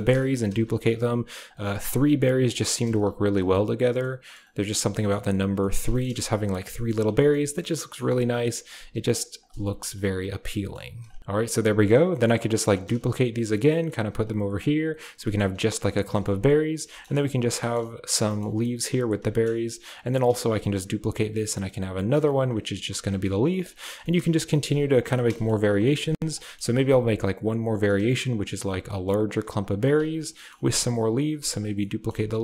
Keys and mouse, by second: 0.2 shift+click, 0.4 shift+d, 0.8 r, 1.6 drag, 1.9 r, 2.2 g, 2.8 shift+d, 3.2 r, 3.9-4.3 drag, 4.4 g, 4.8 middle drag, 5.1 g, 5.5 middle drag, 5.8 shift+middle click, 6.0 g, 6.9 a, 7.3-7.9 drag, 8.3 click, 8.4 g, 8.8 r, 9.1 g, 9.5 a, 10.0-10.7 drag, 11.0 click, 11.2 a, 11.8 click, 12.1 shift+click, 12.4 shift+click, 12.9 shift+d, 14.2 a, 14.6 click, 15.0 g, 16.1 middle click, 16.2 a, 17.1 drag, 17.6 click, 18.2 shift+click, 18.3 middle click, 18.5 middle click, 19.2 shift+middle click, 19.7 click, 20.2-25.0 typing, 22.4 click, 24.0 drag, 25.3 click, 26.0 drag, 26.3 click, 26.5-30.9 typing, 30.0 click, 30.2 click, 31.6 click, 32.0-32.4 typing.